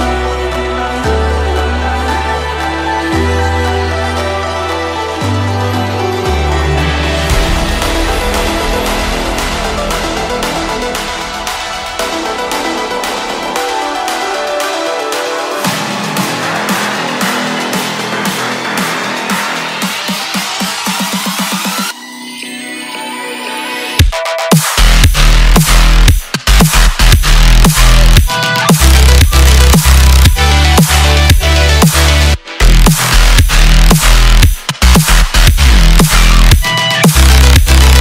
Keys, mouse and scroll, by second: 2.7 space, 4.7-7.7 drag, 9.0-12.0 drag, 13.4 space, 15.6 space, 17.1-18.8 drag, 18.8-19.3 scroll up 1, 19.3-19.9 scroll down 2, 19.9 space, 20.9-21.5 scroll up 2, 22.1 space, 22.9-27.2 drag, 27.2-27.5 scroll down 2, 27.5 scroll up 1, 27.6-29.9 middle drag, 29.9-30.4 scroll up 1, 30.4-30.8 scroll down 2, 30.8 middle click, 31.8 space.